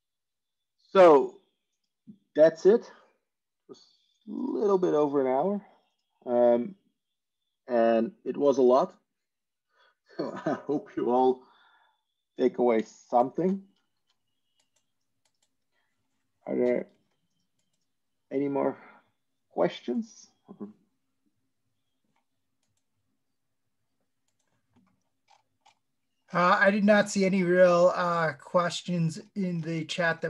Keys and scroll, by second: 13.6 ctrl+shift+e.